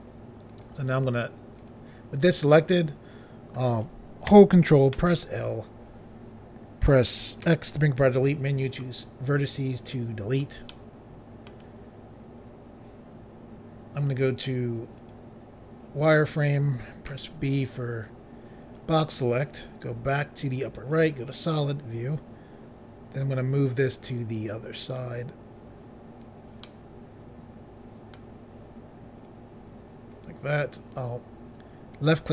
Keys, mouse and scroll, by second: 0.5 click, 1.6 click, 5.0 ctrl+i, 7.5 x, 8.7 click, 10.7 middle click, 15.0 click, 17.1 b, 17.6 click, 20.8 click, 23.2 click, 26.7 middle click, 29.3 click, 32.0 click.